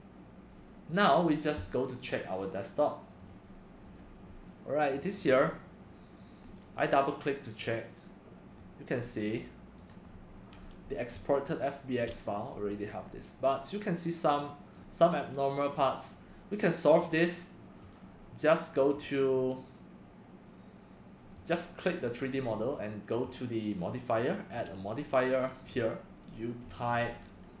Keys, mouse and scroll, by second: 5.2 click, 6.4 click, 6.6 click, 7.7 click, 8.6-11.1 middle drag, 11.1-12.5 drag, 12.5 middle click, 12.7 click, 12.7-14.8 middle drag, 15.0-16.9 middle drag, 16.9 click, 17.3 click, 18.0-20.9 drag, 21.3 middle click, 22.6-27.6 drag.